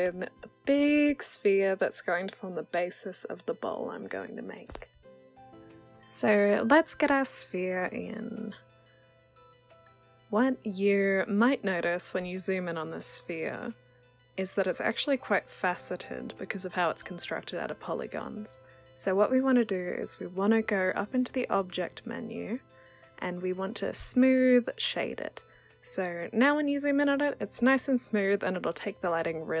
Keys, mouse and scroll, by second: 0.4-4.7 drag, 9.2 w, 9.9 click, 11.1-13.7 alt+drag, 14.1 click, 14.6-15.6 alt+right drag, 15.6-17.8 alt+drag, 17.8-18.7 alt+right drag, 18.7-20.5 alt+drag, 21.3-23.9 drag, 24.3-25.6 alt+right drag, 25.6-28.1 alt+drag, 28.4-29.6 alt+right drag.